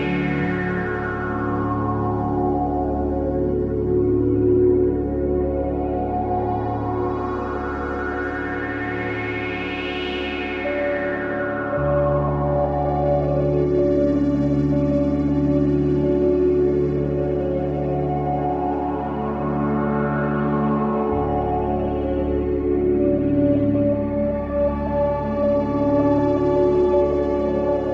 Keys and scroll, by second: 20.7 F1, 20.9 F2, 23.6 F1, 23.7 F2.